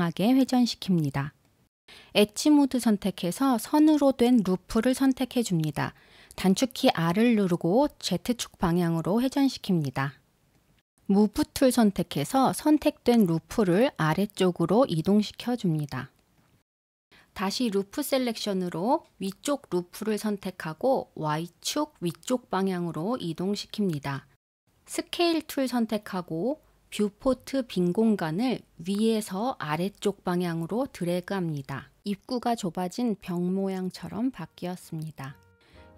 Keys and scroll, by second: 16.8 u, 17.1 l.